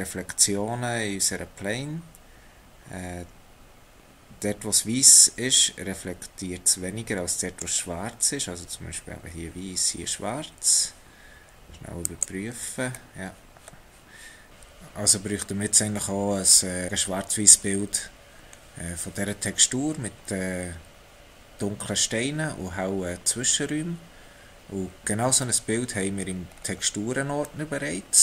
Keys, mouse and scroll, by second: 0.5-1.1 scroll up 1, 1.1 middle click, 14.5 click, 15.2 x, 25.9 scroll down 2, 26.5 scroll down 3, 27.4 middle click.